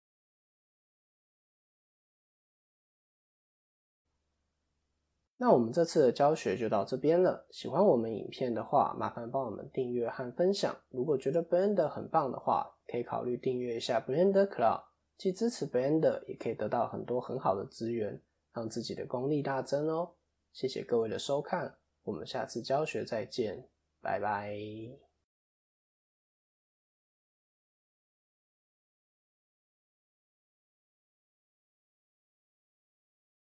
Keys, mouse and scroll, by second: 2.2 click, 2.2-3.4 scroll up 3, 3.4 click, 4.9 click, 4.9-5.4 scroll down 2, 5.3 middle click, 12.7 middle click.